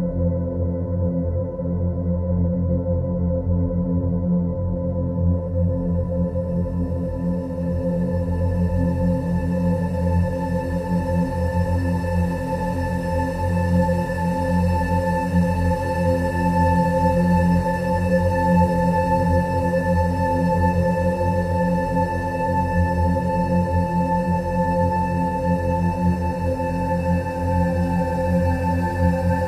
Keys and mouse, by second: 1.0 shift+d, 2.6-8.8 drag, 9.8 Tab, 12.1 r, 13.5 Tab, 13.5 Delete, 14.8 click, 16.1 shift+a, 21.3 g, 24.1 Tab, 24.8 1, 26.0 click, 26.9-27.3 drag, 28.4-29.4 drag.